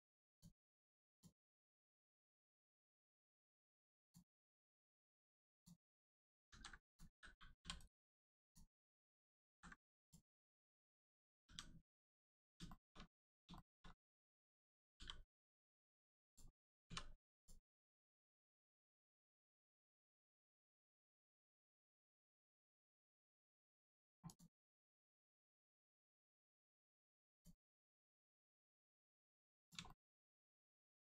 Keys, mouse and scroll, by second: 0.2 click, 1.6 scroll up 1, 2.2 middle click, 4.0 click, 4.4 right click, 5.5 click, 5.9-6.3 scroll down 1, 6.5 ctrl+z, 6.8 click, 7.6 l, 7.8 right click, 8.4 click, 9.4 ctrl+z, 10.0 click, 10.3 scroll up 1, 11.4 g, 12.0 right click, 12.6 shift+middle click, 13.0 scroll up 1, 13.5 shift+middle click, 13.8 scroll up 1, 15.0 g, 16.2 click, 16.8 click, 16.8 2, 17.3 click, 18.3 right click, 20.0 click, 21.2 scroll down 1, 21.6 shift+middle click, 22.1 middle click, 23.0 middle click, 24.2 click, 24.5 a, 25.9 i, 26.6 right click, 27.3 click, 29.6 click, 29.8 shift+middle click, 30.1 middle click, 30.2 middle click, 30.9 click.